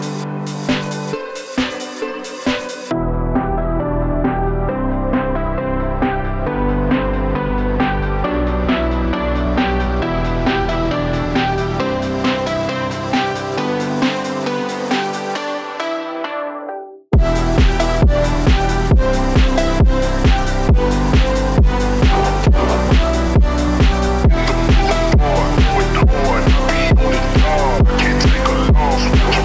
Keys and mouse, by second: 2.2 shift+click, 2.7 g, 7.2 click, 7.9 shift+click, 8.5 g, 10.4 alt+click, 11.7 g, 13.3 click, 13.3 g, 13.6 click, 14.1 g, 15.3 click, 15.5 g, 17.4 alt+click, 18.0 e, 20.7 shift+click, 22.0 g, 23.0 g, 23.7 z, 24.3 click, 24.7 g, 25.8 click, 25.9 g, 26.9 click, 27.0 g, 28.1 g, 29.0 g.